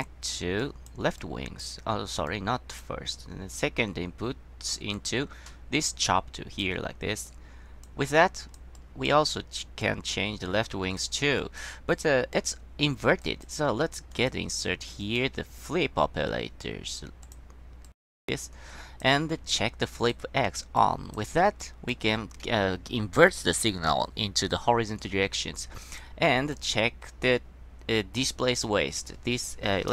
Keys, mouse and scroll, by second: 0.7 click, 1.3-1.7 drag, 2.4-2.9 drag, 5.1-6.7 drag, 7.4 click, 8.3 click, 8.9-9.3 drag, 9.9 drag, 10.4-11.1 drag, 11.5 click, 12.1-12.5 drag, 13.3 click, 14.2 click, 15.1 click, 17.4 click, 18.0 click, 18.3-19.2 drag, 20.1 click, 20.9-21.3 drag, 21.7-22.0 drag, 22.4-22.8 scroll down 1, 26.0 click, 26.7 click, 28.4-28.8 drag.